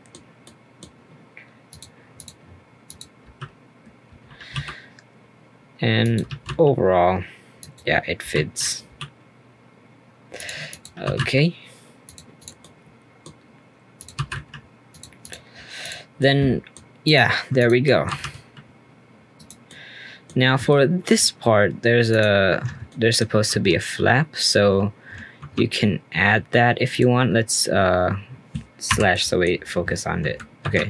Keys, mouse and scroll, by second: 1.7 click, 2.1 click, 2.8 click, 3.2 g, 6.2 g, 8.2 g, 10.7 click, 11.0 g, 12.3 click, 12.6-13.9 middle drag, 13.9 click, 14.1 g, 15.2 click, 15.8 click, 16.2 middle click, 17.0 click, 17.6 click, 17.8 middle click, 18.1 r, 19.6-20.3 middle drag, 20.3-20.7 scroll up 2, 20.7 shift+middle click, 21.2-21.6 scroll up 2, 21.6-22.1 scroll down 1, 22.1 click, 22.5-22.9 scroll up 1, 22.9 shift+middle click, 23.5 Tab, 25.4 ctrl+r, 28.9 /, 29.1 middle click, 29.5-30.6 scroll up 2, 30.6 ctrl+r.